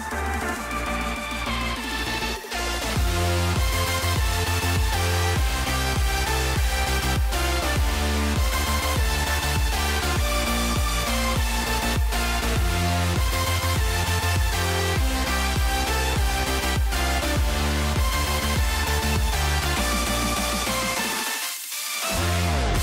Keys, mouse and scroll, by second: 0.1 shift+middle click, 3.6 click, 7.4 click, 8.1-10.1 drag, 16.6 KP_0, 18.3 shift+middle click, 18.8 shift+middle click, 19.4 middle click, 20.2 shift+middle click, 20.6 shift+middle click, 21.5 shift+middle click.